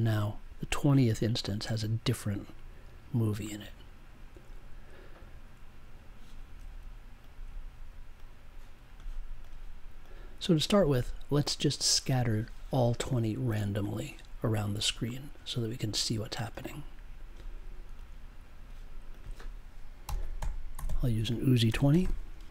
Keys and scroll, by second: 20.0 n, 20.8 i, 21.6 space, 21.9 2.